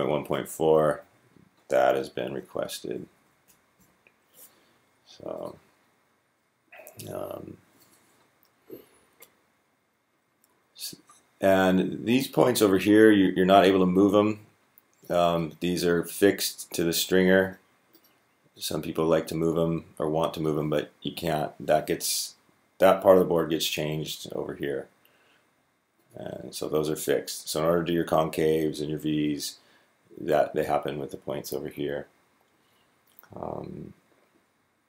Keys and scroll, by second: 2.0 Down, 2.2 Down, 2.3 Down, 2.7 Up, 2.9 Up, 3.0 Up, 3.3 Up, 3.6 Up.